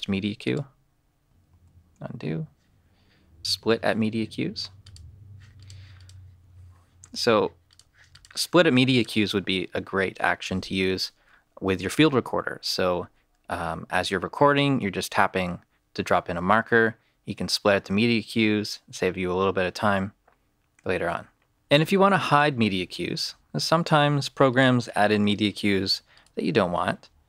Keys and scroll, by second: 1.4 super+z, 23.0 super+z.